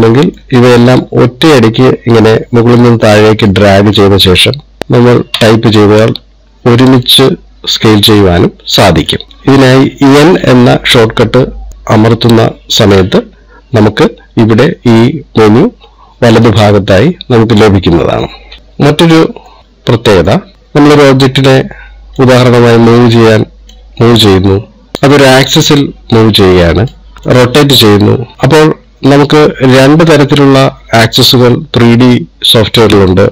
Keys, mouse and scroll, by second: 0.9 click, 7.5 middle click, 9.3-9.6 scroll down 2, 10.9 n, 12.4 n, 19.0-19.5 scroll down 3, 19.6 middle click, 20.5 click, 22.7 click, 24.2 click, 26.7 click, 27.7 click, 28.3 click, 29.6 click.